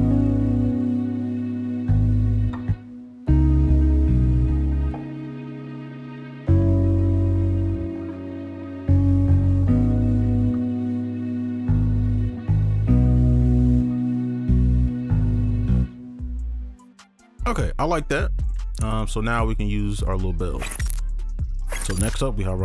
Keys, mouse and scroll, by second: 0.1 right click, 2.0 ctrl+click, 3.3 shift+space, 4.2 alt+click, 4.7 right click, 5.8 scroll down 1, 5.8 right click, 6.7-8.7 scroll up 1, 15.8 space, 16.1 ctrl+click, 16.6 alt+scroll down 2, 16.8 right click.